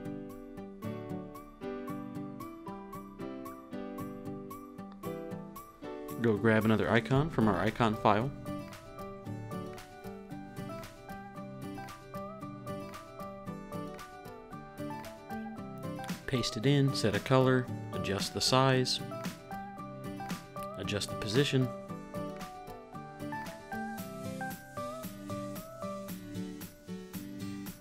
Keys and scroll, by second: 1.5-2.6 typing, 4.0 shift+Right, 5.1 super+s, 11.2 super+c, 13.2 super+c, 15.2 super+v, 16.3 shift+Up, 19.5-22.4 typing, 22.5 Return, 25.4 super+z, 27.2 super+z.